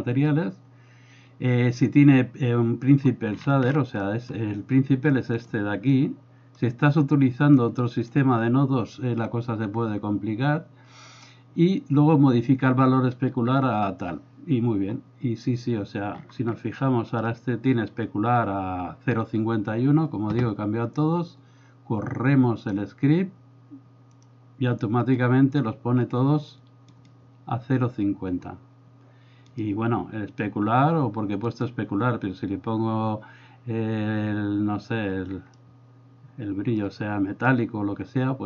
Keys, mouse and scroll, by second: 4.1 middle click, 5.4 click, 6.0 click, 7.6 click, 16.8 middle click, 22.7-24.2 drag, 35.6-36.9 middle drag.